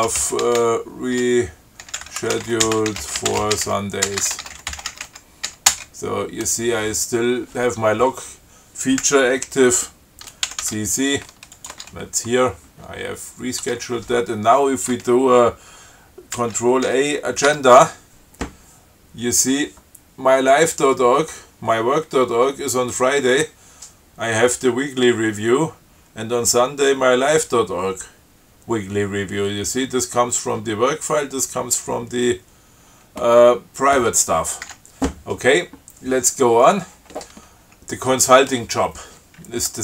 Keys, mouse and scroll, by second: 0.0-6.2 typing, 10.7 ctrl+c, 11.8 click, 12.0 Tab, 13.9 Tab, 16.6 ctrl+c, 17.1 ctrl+a, 34.9 q, 39.7 Down.